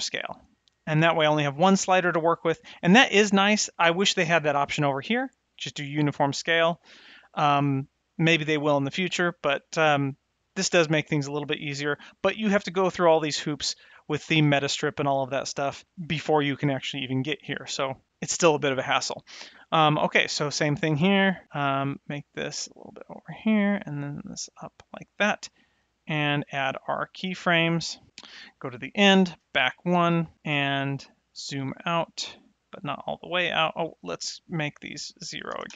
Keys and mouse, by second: 2.0 click, 19.0-20.4 drag, 21.8-22.9 drag, 23.4 click, 24.3 click, 25.6 click, 26.0 click, 27.4 click, 28.6 shift+Right, 29.5 Left, 31.2 click.